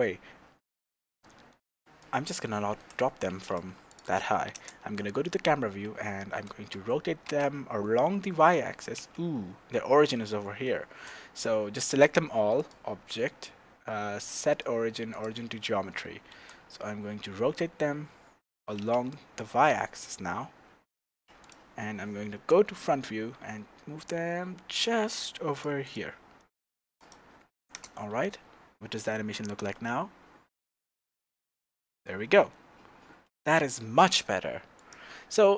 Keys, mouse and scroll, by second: 1.8 click, 2.2-4.0 middle drag, 3.4 g, 4.0 click, 4.5 KP_0, 6.3 r, 9.1 Escape, 9.9-10.4 scroll down 1, 10.4-12.6 shift+middle drag, 12.6-21.5 drag, 16.3 r, 22.3 KP_1, 23.0 scroll up 1, 23.4 g, 23.5 right click, 25.8 click, 26.4 middle click, 26.6-27.0 scroll down 2, 27.0 click, 27.3 scroll up 1, 27.7 KP_0, 29.5 click, 34.7 click.